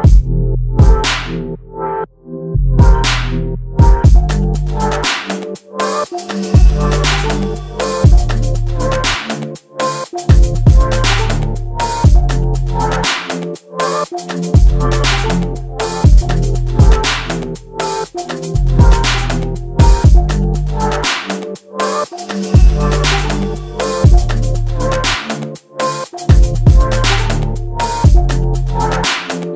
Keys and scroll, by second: 7.3 space, 9.1-11.0 typing, 12.8 space, 13.1 q, 14.4 space, 15.0 m, 17.9 m, 23.7 q.